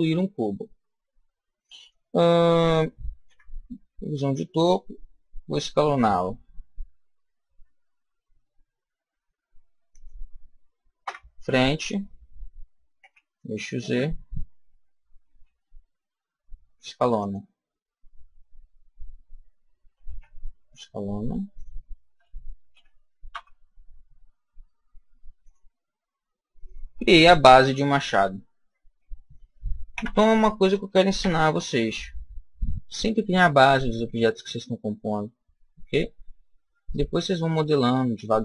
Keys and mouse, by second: 3.2 KP_7, 6.2 s, 9.9 click, 10.9 KP_1, 12.9 z, 15.2 s, 17.2 click, 17.6-20.0 middle drag, 19.7 s, 21.5 click, 22.6 g, 25.4 click, 27.2-31.1 middle drag, 29.8 Tab, 31.1 z, 31.7-33.3 middle drag, 33.6 middle click, 35.5-36.8 middle drag.